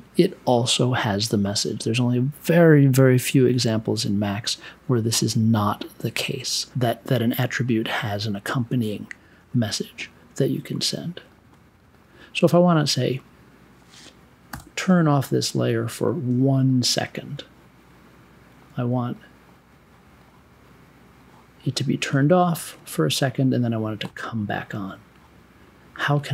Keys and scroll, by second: 14.5 0, 19.6 1.